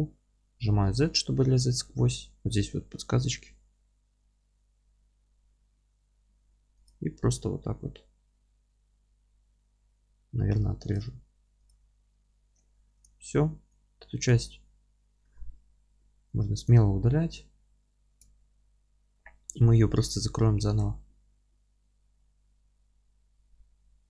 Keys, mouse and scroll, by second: 13.0 click, 14.2-17.3 drag, 15.4 F3, 17.0 scroll down 1, 17.3-24.0 alt+middle drag.